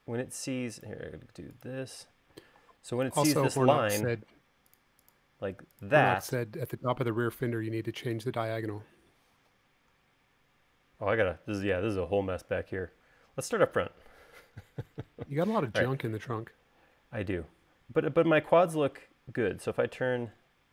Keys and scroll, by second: 2.1-2.5 typing.